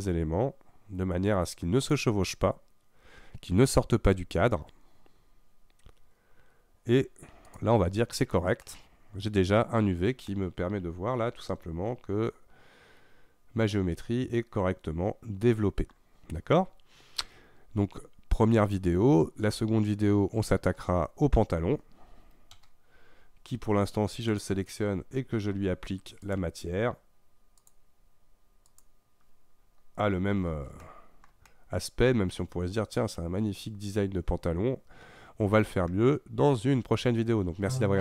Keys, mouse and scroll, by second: 3.5-4.0 scroll up 3, 4.0 scroll down 1, 5.2-7.5 scroll down 2, 7.5 click, 8.3 scroll down 2, 8.7-13.3 middle drag, 20.6 Tab, 22.7 KP_Divide, 24.3 click, 26.2 click, 27.6-29.6 drag, 29.6-30.3 scroll up 5, 30.8-36.2 shift+middle drag, 36.2-37.8 scroll up 1, 37.8 scroll up 1.